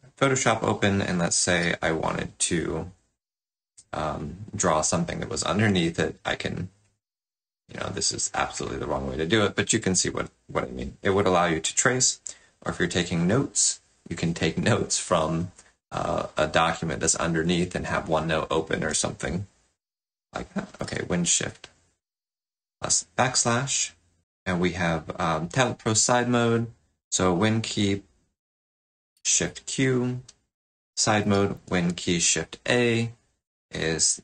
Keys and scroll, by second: 0.0 space, 1.5 shift+super+\, 20.8 shift+super+\, 29.3 shift+super+q, 31.5 shift+super+a.